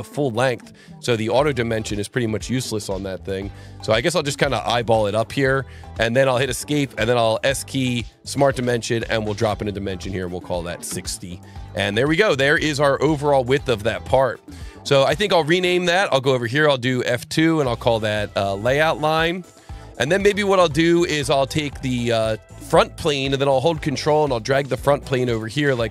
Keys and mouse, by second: 5.6 click, 6.2 Escape, 7.8 click, 8.8 click, 10.1 KP_6, 10.7 KP_0, 10.8 KP_Enter, 14.2 click, 16.0 click, 16.6 F2, 17.5-20.0 typing, 21.1 click, 22.9 click, 24.2 ctrl+click.